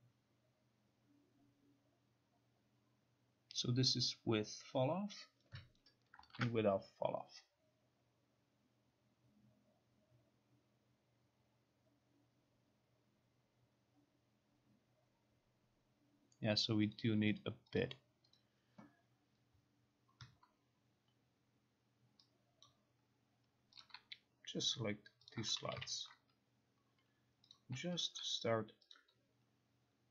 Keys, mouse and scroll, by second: 5.8 click, 17.0 click, 17.5 click, 17.8 click, 18.5 click, 22.7 click, 23.9 click, 25.4 shift+click, 27.6 click, 28.1 shift+click, 29.0 click.